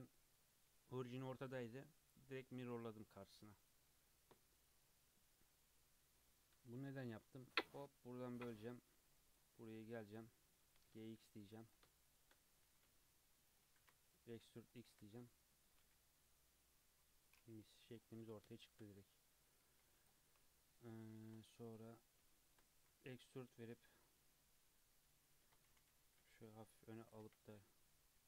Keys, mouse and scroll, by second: 3.2 click, 3.6 click, 4.1-5.0 middle drag, 5.0 KP_3, 5.4-6.1 scroll up 2, 6.5 Tab, 7.1 ctrl+r, 9.3 click, 9.5-9.9 middle drag, 9.9 2, 10.1 click, 10.3 middle click, 10.7 g, 11.9 shift+middle click, 12.7 g, 13.7 e, 15.0 Tab, 15.2-15.8 middle drag, 15.8 alt+z, 16.1 scroll down 1, 16.2-17.6 middle drag, 17.6 KP_3, 17.9-18.5 scroll up 3, 18.5-19.0 shift+middle drag, 19.0 Tab, 19.6 2, 20.0 alt+click, 20.5 scroll down 4, 21.0-21.6 shift+middle drag, 21.6 alt+click, 21.9 scroll up 2, 22.3 shift+middle click, 22.7 e, 23.5-24.1 scroll up 3, 25.7 g, 27.2 1, 27.5 alt+z, 27.9 click.